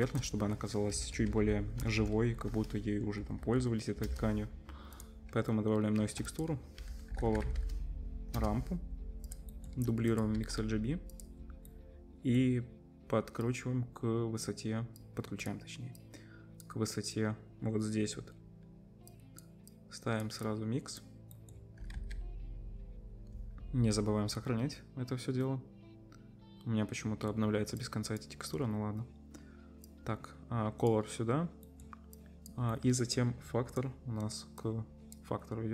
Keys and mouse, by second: 0.0 shift+a, 2.0 BackSpace, 6.0 shift+a, 8.4-9.6 drag, 9.6 middle click, 10.4 shift+d, 11.6 right click, 13.4-15.5 drag, 13.4-15.5 middle drag, 13.4-15.5 right drag, 16.0-20.2 drag, 16.0-20.2 middle drag, 16.0-20.2 right drag, 20.4-32.1 middle drag, 21.8-28.6 ctrl+drag, 21.8-28.6 ctrl+right drag, 28.6 click, 28.6 right click, 31.7 click, 31.7 right click, 32.1-35.7 drag, 32.7-35.7 middle drag, 32.7-35.7 right drag.